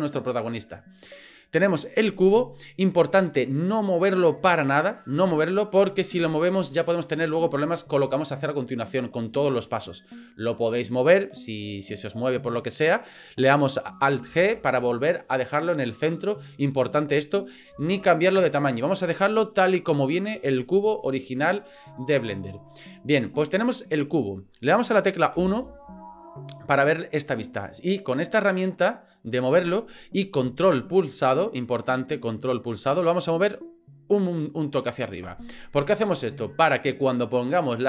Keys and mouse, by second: 11.8 middle click, 14.3 alt+g, 25.3 KP_1, 27.8 click, 33.4 ctrl+click.